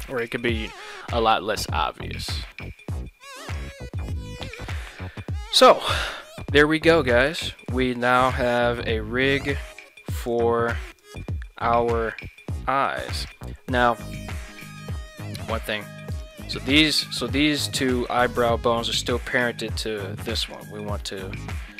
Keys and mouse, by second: 1.3 s, 1.6 x, 3.4 right click, 7.5 shift+middle click, 8.2 g, 10.3 right drag, 11.1 right click, 13.2 right click, 15.1 shift+middle click, 19.5 right click, 19.7 g, 20.5 right click, 21.2 Tab.